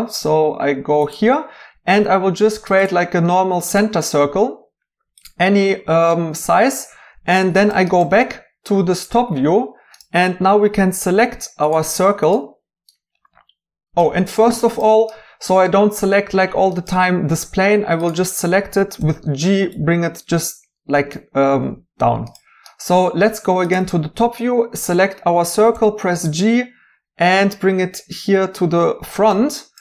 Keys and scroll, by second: 19.0 g, 25.7 g.